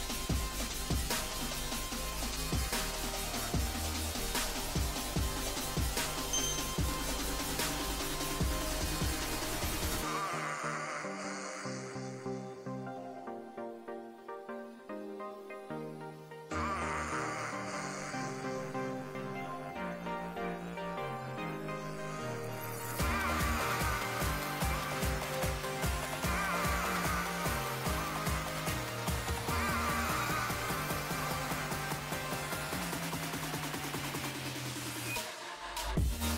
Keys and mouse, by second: 1.1-2.7 drag, 1.8 x, 3.5 z, 4.0-5.5 middle drag, 4.9-6.7 drag, 4.9 right click, 8.2 middle click, 9.6 Tab, 11.6 Tab, 12.4 z, 12.8 a, 12.9 a, 14.4-16.2 middle drag, 15.0 z, 16.0 z, 18.1 z, 19.1 z, 21.0 ctrl+r, 21.7 z, 22.2 Tab, 25.5 Tab, 26.9 ctrl+r, 32.8 ctrl+r.